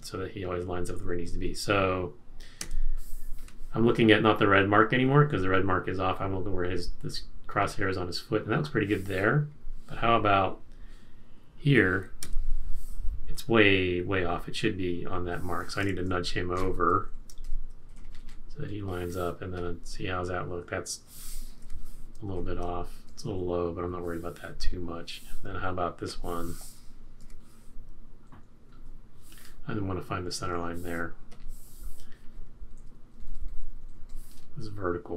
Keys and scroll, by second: 2.6 F6, 12.2 F6, 16.2 shift+Right, 16.5 shift+Right, 17.1 shift+Right, 17.4 typing, 17.7 Right, 19.7 typing, 21.6 F6, 22.4 shift+Left, 22.7 Right, 22.9 Right, 23.2 Right, 24.8 typing, 27.2 F6, 28.3 Right, 28.5 Right, 28.7 Right, 32.8 Right, 33.1 Right, 33.2 Right, 33.4 Right, 33.5 Right, 33.6 Right, 33.7 Right.